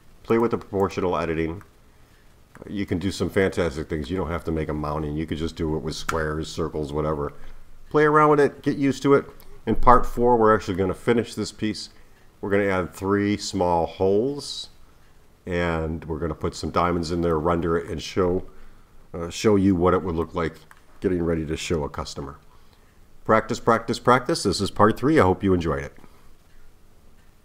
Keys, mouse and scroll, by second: 0.3 click, 0.8 click, 1.6-6.4 middle drag.